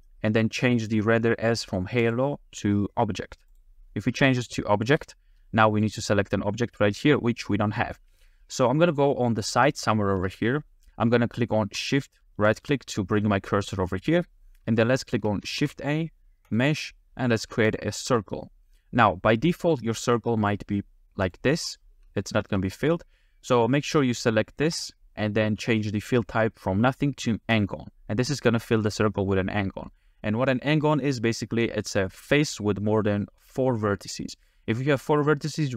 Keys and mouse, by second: 2.0-3.6 drag, 4.8 space, 5.7 click, 7.8 middle click, 8.3-10.2 shift+middle drag, 12.5 shift+click, 14.8-15.1 shift+middle drag, 15.6 shift+a, 20.4 click, 22.3 shift+click, 24.7-27.6 drag.